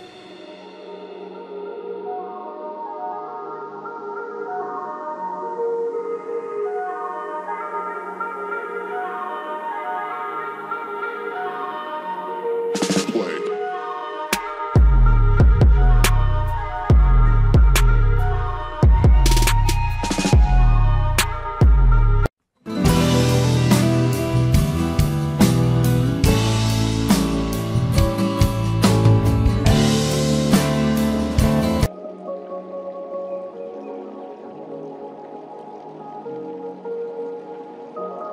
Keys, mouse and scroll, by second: 0.4 g, 2.2 click, 2.4 g, 3.6 scroll up 1, 3.7 click, 4.3 scroll down 1, 4.4 click, 5.1 scroll up 1, 5.3 click, 5.4 g, 5.6 click, 6.3 click, 7.4 scroll up 1, 7.5 scroll down 1, 7.7 click, 7.9 scroll up 1, 8.0 click, 8.5 scroll down 1, 8.7 click, 10.3 ctrl+shift+q, 10.4 click, 11.0 ctrl+shift+q, 11.0 click, 11.7 scroll down 2, 11.8 click, 12.4 click, 13.0 click, 13.5 click, 13.7 ctrl+right click, 13.8 click, 14.0 shift+Page_Down, 14.1 click, 14.5 scroll down 1, 14.6 click, 14.7 scroll up 1, 14.8 click, 14.9 scroll down 1, 14.9 click, 16.1 scroll down 1, 16.1 right click, 16.2 click, 16.4 ctrl+z, 16.4 right click, 16.6 click, 17.0 scroll up 1, 17.2 click, 17.9 scroll down 1, 18.0 click, 18.3 scroll up 1, 18.7 click, 19.2 typing, 19.4 alt+click, 20.3 click, 20.4 F4, 20.5 scroll down 1, 20.6 click, 21.0 right click, 21.2 click, 31.8 click, 32.8 scroll up 1, 33.8 click, 34.5 scroll up 1, 37.1 scroll down 1, 37.7 click.